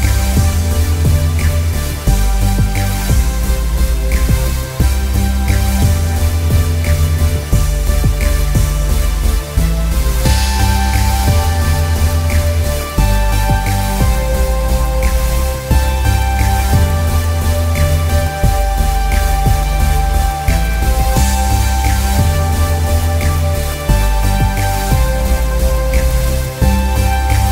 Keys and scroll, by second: 1.8 Return.